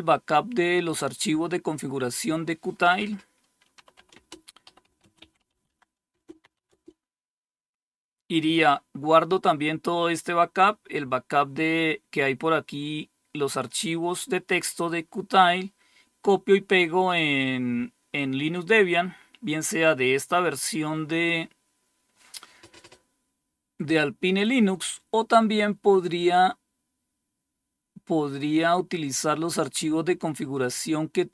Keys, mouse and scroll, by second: 1.4-2.2 scroll down 2, 3.0-7.5 typing, 13.1 click, 29.5-30.0 scroll up 1.